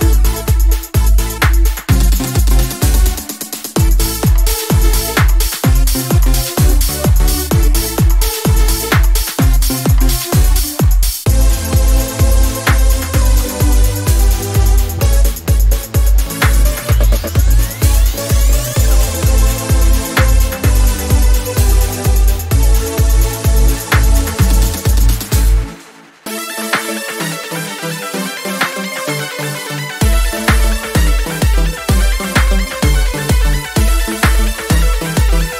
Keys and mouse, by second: 0.0 alt+d, 1.3 m, 4.5 click, 11.3-11.9 middle drag, 13.5 KP_1, 14.4 KP_5, 16.4 shift+a, 23.5-25.2 drag, 25.2 KP_1, 25.7 z, 27.7 Tab, 33.5-34.2 middle drag.